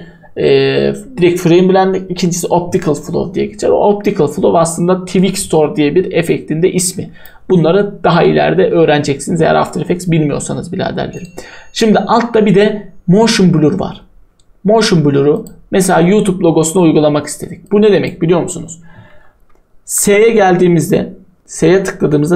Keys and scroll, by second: 19.9 s.